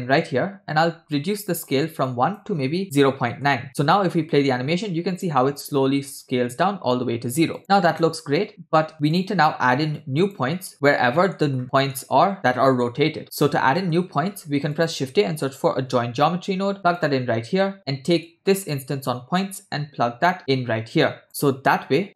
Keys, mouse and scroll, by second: 0.5-1.1 scroll up 2, 1.1 shift+click, 2.1-3.4 shift+drag, 4.3 space, 5.7 space, 7.6 click, 7.6 space, 8.5 space, 8.9 scroll down 5, 9.1-9.5 drag, 9.9 click, 11.2 middle click, 11.6-12.6 scroll up 3, 11.7 middle click, 12.6-13.2 scroll up 1, 13.2 middle click, 13.2 scroll down 1, 13.8 middle click, 14.1 shift+a, 18.3-18.7 drag, 19.4-20.4 drag, 21.1 click.